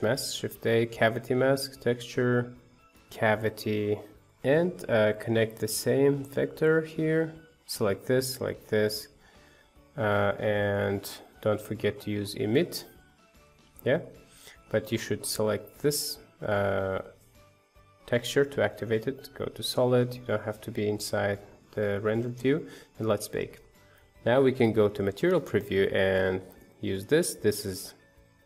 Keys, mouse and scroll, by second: 4.1 click, 5.2 click, 6.1-7.2 drag, 7.5 click, 13.1-19.5 drag, 19.5 z, 25.0 z, 26.2 ctrl+shift+click, 27.1 middle click, 28.1 ctrl+shift+click.